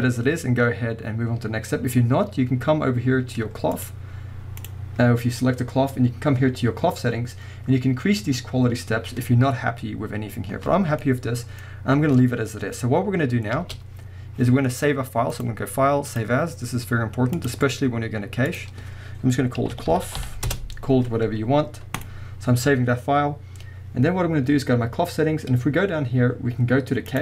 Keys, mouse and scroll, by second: 3.7 click, 4.7 click, 11.0-15.3 middle drag, 11.7-12.0 scroll up 2, 12.4-13.5 scroll up 2, 13.5 space, 15.3-19.3 drag, 25.6-27.1 scroll down 2, 27.1 click.